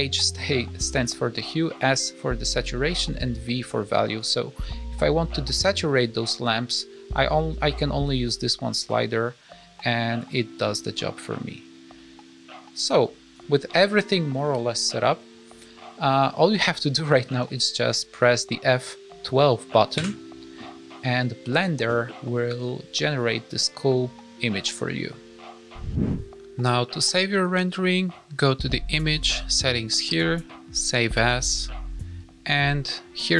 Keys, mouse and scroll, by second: 15.4 click.